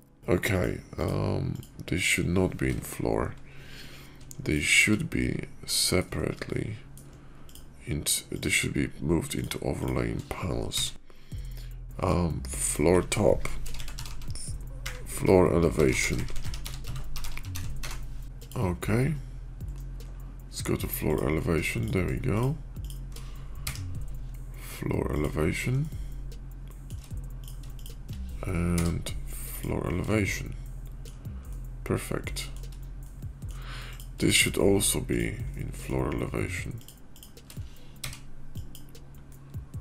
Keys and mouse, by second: 0.4 click, 0.8 click, 1.4 click, 2.8-4.1 middle drag, 4.3 shift+click, 4.7-5.9 middle drag, 6.3-6.8 middle drag, 7.3 shift+middle click, 10.5 m, 13.9 o, 18.3-21.3 drag, 22.2-22.9 shift+drag, 23.5 m, 25.7-26.9 shift+drag, 28.6 m, 30.0-31.0 shift+middle drag, 31.3-32.5 shift+middle drag, 32.9 middle click, 34.0-35.8 shift+middle drag, 37.8 m, 39.2-39.8 middle drag.